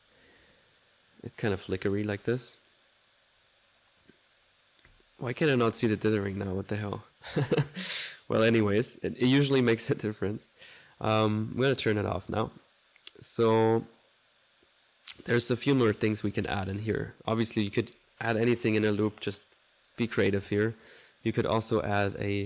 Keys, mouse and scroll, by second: 3.8 click, 4.4 click, 5.1 click, 6.1 click, 7.2 click, 8.0 middle click, 8.5 click, 9.3 right click, 9.6-10.4 typing, 10.0 click, 11.4 click, 11.8 click, 13.1-13.9 typing, 13.4 click, 14.1 right click, 14.9-17.5 drag, 20.6 middle click, 21.2 click, 22.1 middle click.